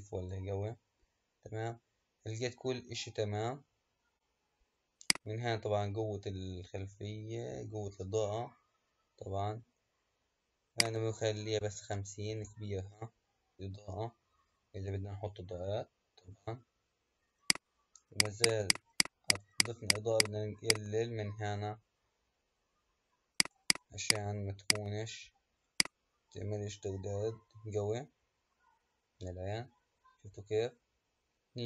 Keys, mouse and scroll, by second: 3.5-4.6 scroll down 1, 4.6-5.0 scroll down 1, 5.0-8.2 drag, 10.6-13.7 drag, 17.3-28.9 drag.